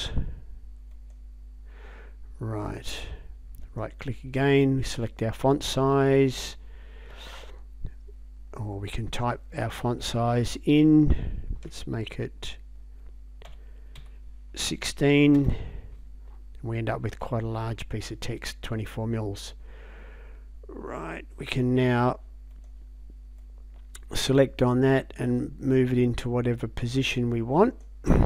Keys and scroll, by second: 13.5 1, 14.0 6, 15.4 Return.